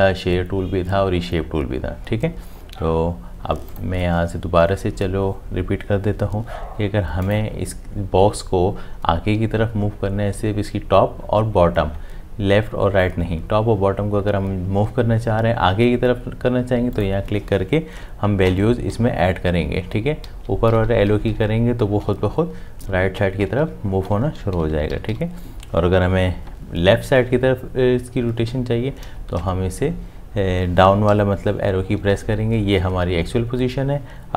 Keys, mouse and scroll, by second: 18.5 Up, 29.0 Down.